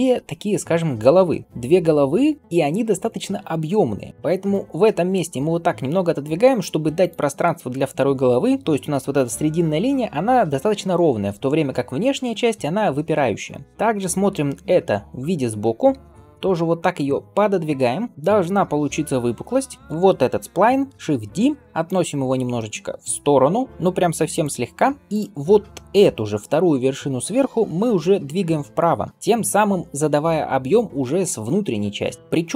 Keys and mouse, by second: 4.1 g, 15.7 g, 19.8 ctrl+l, 21.0 shift+d, 23.0-32.5 middle drag, 27.5 g.